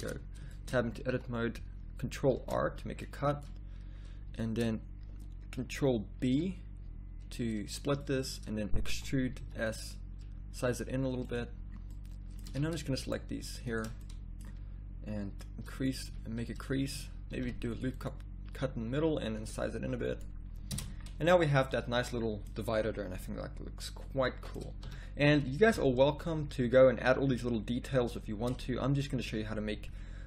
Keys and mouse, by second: 0.1 Tab, 0.5 middle click, 1.1 a, 2.3 ctrl+r, 6.2 ctrl+b, 9.0 e, 12.5 a, 14.1-15.5 middle drag, 16.1 a, 17.4 ctrl+r, 19.5 s, 20.8 Tab, 24.8 a, 25.6 KP_1, 25.9 z.